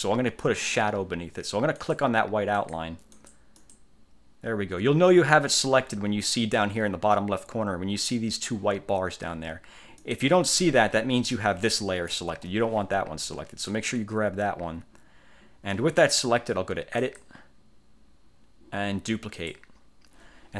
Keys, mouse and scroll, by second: 1.9 click, 2.7 click, 3.2 click, 10.1 click, 11.4 click, 12.4 ctrl+z, 13.8 click, 17.1 click, 19.4 click.